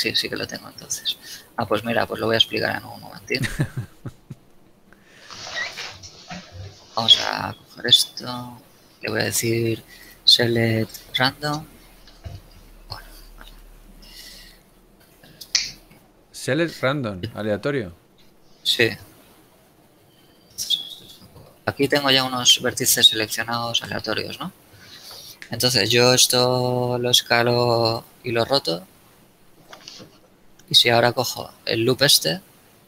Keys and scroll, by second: 2.7 ctrl+Tab, 6.0 shift+a, 13.7 KP_3, 14.1 z, 27.2 s.